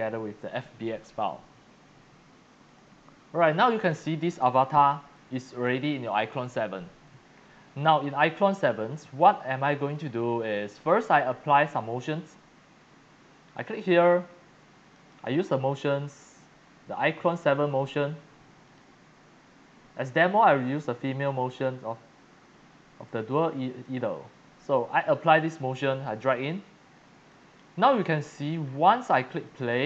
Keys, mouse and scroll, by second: 2.6 click, 3.2 middle click, 3.5 scroll down 4, 3.7-4.1 scroll, 4.6-5.0 scroll, 5.1 click, 5.2-10.8 typing, 6.0-7.2 drag, 7.3 scroll down 2, 8.1-10.1 drag, 10.8 click, 12.0 click, 14.9 click, 17.6 click, 18.6 click, 20.0 click, 23.8-25.0 drag, 25.4 click, 26.1 click, 26.9 scroll, 27.2 x, 27.2-28.6 drag, 27.8 c, 29.1-29.6 typing, 29.1 click.